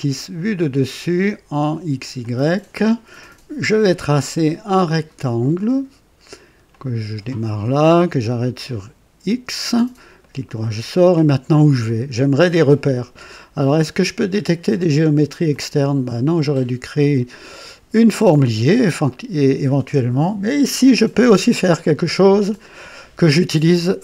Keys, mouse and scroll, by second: 1.4 click, 2.1 click, 4.8 click, 6.6 click, 8.6 click, 10.1 right click, 12.2 scroll up 2, 14.3 click, 15.5 click, 16.4 click, 18.2 click.